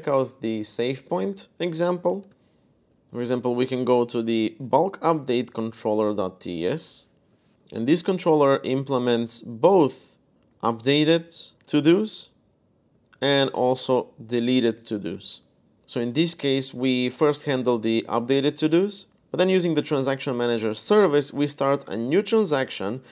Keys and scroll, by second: 1.0 super+Tab, 2.0-3.8 typing, 5.8-8.7 typing, 10.1-11.5 typing, 11.5 Escape, 12.7-15.2 typing, 19.2 u.